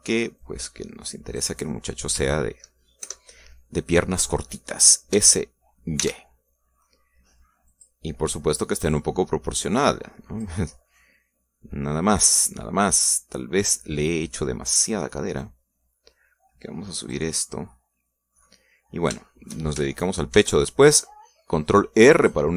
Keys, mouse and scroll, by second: 1.4-2.6 drag, 4.0 ctrl+KP_Add, 6.1 s, 7.0 y, 8.7 click, 9.8-11.6 drag, 11.7 scroll down 2, 12.0-15.6 middle drag, 16.4-18.3 drag, 18.3-19.4 middle drag, 19.9 scroll up 3, 20.3 shift+middle click, 21.3 ctrl+r, 21.8 ctrl+click.